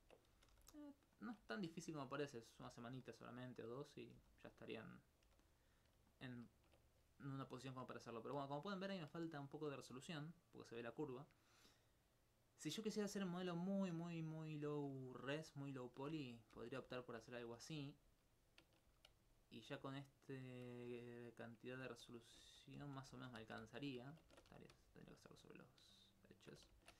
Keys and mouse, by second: 1.2 shift+click, 1.6 alt+click, 2.1 right click, 2.6 g, 3.6 click, 4.0 right click, 4.2 g, 4.8 click, 5.1 right click, 5.8 click, 6.1 alt+click, 11.2 alt+click, 13.2 alt+click, 16.6 ctrl+x, 17.6 alt+a, 17.8 alt+a, 18.1 alt+a, 18.9 alt+a, 19.3 alt+click, 20.4 alt+z, 20.9 alt+z, 21.9 ctrl+z, 22.4 ctrl+z, 22.8 ctrl+z, 23.1 ctrl+z, 23.4 ctrl+z, 23.6 ctrl+z, 24.1 alt+click, 25.0 alt+click, 25.4 alt+s, 26.8 ctrl+x.